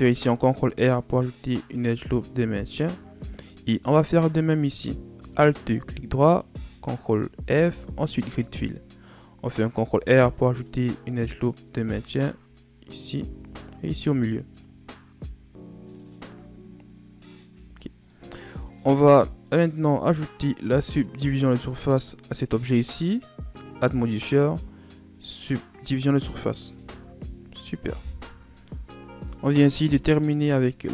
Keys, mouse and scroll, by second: 1.9 ctrl+r, 3.2 middle click, 3.9-4.2 scroll up 1, 4.2-5.5 middle drag, 5.5 alt+right click, 6.1 alt+right click, 7.4 ctrl+f, 9.6 ctrl+r, 11.7 ctrl+r, 14.3 scroll down 1, 14.6 ctrl+r, 15.2-15.6 scroll down 1, 16.1 Tab, 17.4 a, 17.7 scroll down 1, 18.0-19.0 middle drag, 19.0-19.3 scroll down 1, 19.3 middle click, 19.7-20.3 scroll up 2, 20.3 right click, 22.3 click, 23.4-26.1 drag, 26.1-26.6 scroll down 4, 26.6 a, 26.9-28.1 scroll down 2, 28.1 KP_1, 29.2-30.9 scroll down 4.